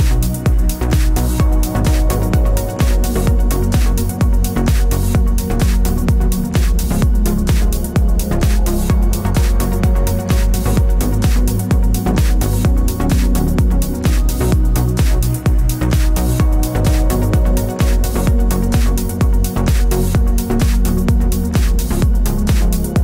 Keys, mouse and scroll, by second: 1.4-4.2 middle drag, 2.7 ctrl+r, 4.0 3, 4.2 click, 4.4 middle click, 5.0 shift+click, 5.3 s, 7.0 click, 7.1-10.0 middle drag, 8.3 shift+a, 10.0 click, 10.7 click, 11.6 s, 18.9 l, 20.2-23.0 middle drag, 21.9 a, 22.4 l.